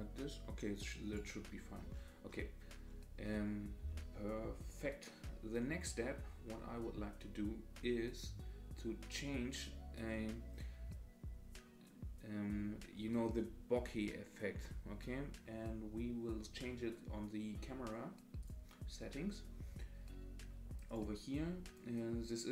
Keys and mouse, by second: 3.8 space.